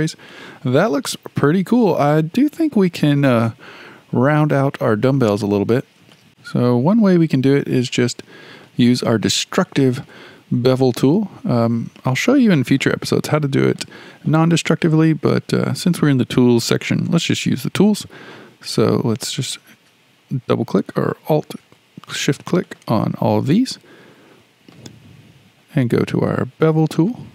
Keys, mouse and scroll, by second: 0.0-0.3 scroll down 1, 0.3-5.0 middle drag, 5.0-6.1 scroll up 4, 6.1 shift+middle click, 6.3 KP_1, 7.4-7.8 scroll up 1, 7.8-13.1 shift+middle drag, 13.1 scroll down 1, 13.4 shift+middle click, 14.0 scroll down 1, 14.3-19.2 shift+middle drag, 19.2 click, 19.4 click, 21.1 shift+click, 21.3 shift+click, 22.5 shift+click, 22.7 shift+click, 23.7-26.7 shift+middle drag, 26.9-27.3 drag.